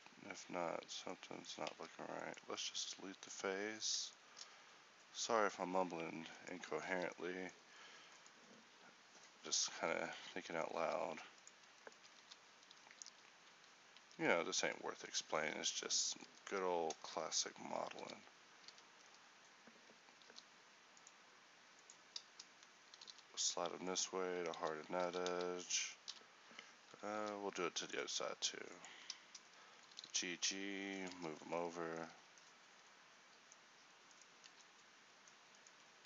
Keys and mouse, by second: 0.7 z, 1.8 ctrl+t, 3.1 x, 5.6 x, 7.0 z, 8.8 x, 9.9 z, 10.9 ctrl+t, 12.2 z, 13.2 f, 13.6 z, 14.1 Tab, 16.3 Tab, 18.1 z, 18.8 a, 20.4 k, 23.0 g, 24.6 z, 25.1 z, 25.4 a, 26.2 n, 27.3 k, 30.0 g, 31.2 Tab, 31.5 z, 32.2 a, 34.6 Tab.